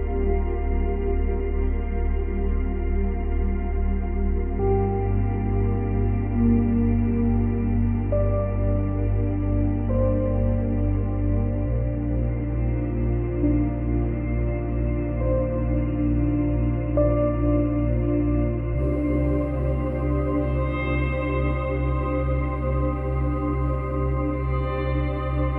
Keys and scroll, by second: 0.0 ctrl+c, 0.2 ctrl+v, 3.6 ctrl+z, 9.3 space, 11.2 space, 12.8 space, 15.1 space, 16.6 space, 19.2 space, 20.6 space.